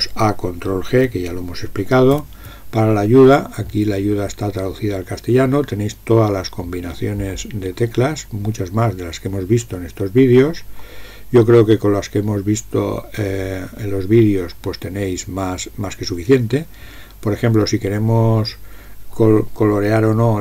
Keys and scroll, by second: 2.2 ctrl+g.